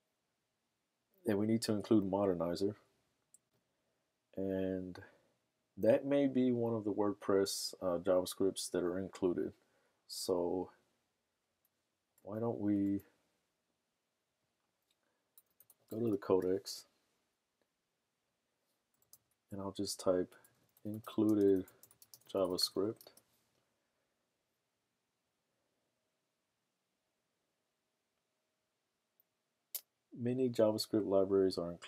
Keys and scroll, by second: 15.3-17.3 typing, 20.2-23.1 typing, 24.5 typing.